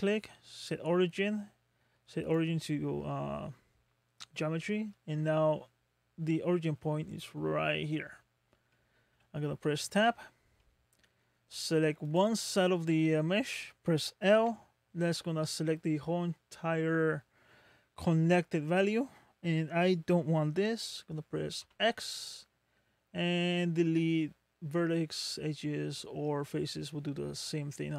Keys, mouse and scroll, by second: 3.1 middle click, 5.9-6.4 scroll up 7, 8.2-8.7 scroll down 4, 8.7 middle click, 10.0 Tab, 10.1 Tab, 10.6 middle click, 12.0 click, 14.4 l, 15.2 middle click, 21.6 x, 21.6 x.